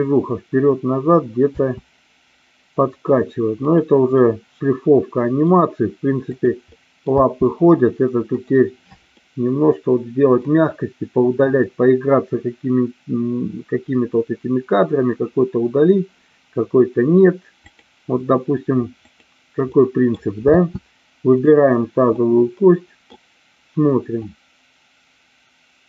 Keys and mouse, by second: 1.5 space, 4.1-5.4 middle drag, 6.6 middle click, 7.1 space, 8.4 click, 9.1-10.5 middle drag, 17.6 click, 19.1 click, 19.6 middle click, 20.5 space, 22.1 middle click, 24.1-25.8 drag.